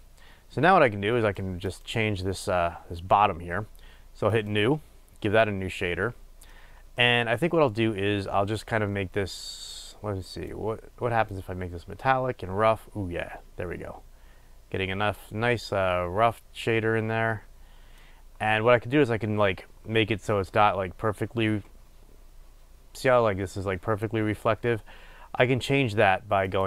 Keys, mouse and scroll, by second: 5.6-8.6 drag, 8.6-10.1 middle drag, 10.1-11.9 drag.